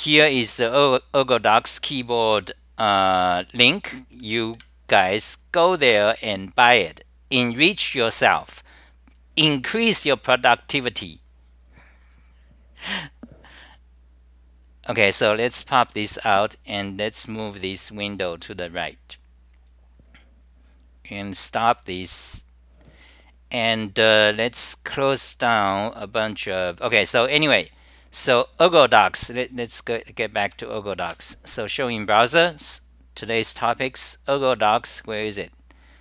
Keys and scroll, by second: 0.0-0.6 typing.